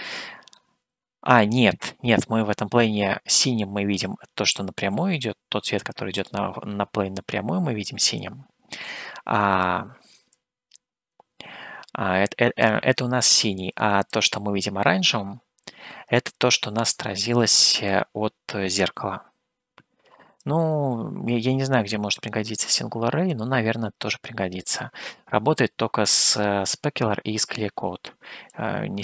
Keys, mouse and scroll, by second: 6.4 click, 8.3 click, 9.7 click, 10.5-13.1 drag, 14.4-18.3 drag, 20.6 click, 22.5 click, 23.5-26.8 drag, 28.7 click.